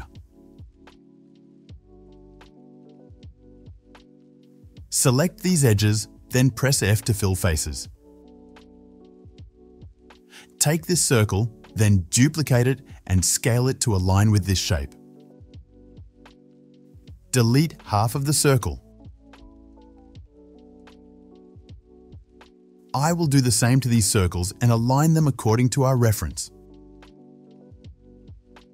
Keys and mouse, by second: 1.2 s, 2.1-5.1 middle drag, 2.6 s, 5.1 shift+click, 5.6-7.1 shift+middle drag, 6.2-8.4 typing, 8.1 click, 10.8 ctrl+shift+z, 11.2 alt+shift+click, 13.1 shift+d, 14.0 s, 16.7 2, 17.8 1, 18.7 click, 19.3 ctrl+click, 19.8 ctrl+z, 21.4 x, 22.8 alt+shift+click, 24.4 shift+d, 25.0 s.